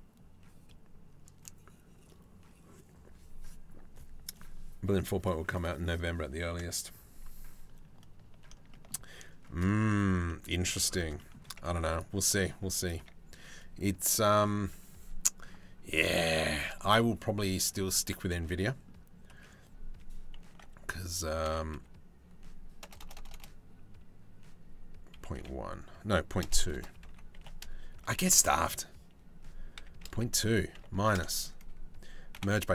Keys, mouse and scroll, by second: 8.3 shift+middle click, 9.8 middle click, 10.8 middle click, 11.3 Tab, 11.8 Tab, 12.2 Tab, 12.4 middle click, 15.5 middle click, 16.4 shift+middle click, 16.8 middle click, 17.9 middle click, 20.1 e, 28.0 ctrl+z, 29.4 e, 31.9 a, 31.9 m.